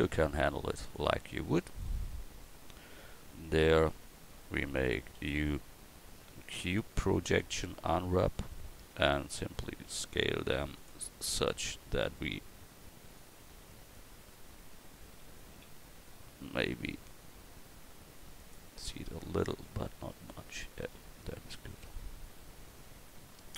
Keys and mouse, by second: 3.0 Tab, 3.6 a, 5.1 u, 15.5 s, 18.8 Tab, 21.0 a.